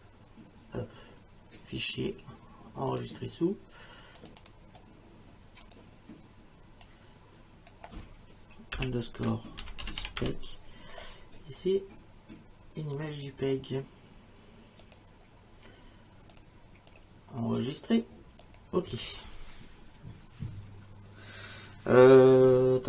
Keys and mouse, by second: 2.9 click, 4.2 click, 5.7 click, 6.9 click, 8.8-10.7 typing, 13.0 click, 14.8 click, 16.3 click, 18.4 click.